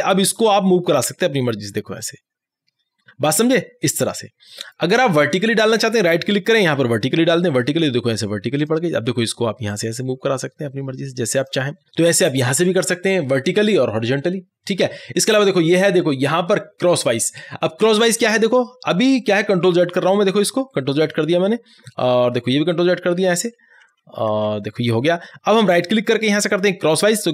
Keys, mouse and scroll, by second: 5.8 right click, 7.6-11.9 drag, 19.4 click, 19.8 ctrl+z, 25.8 right click, 27.2-27.3 drag.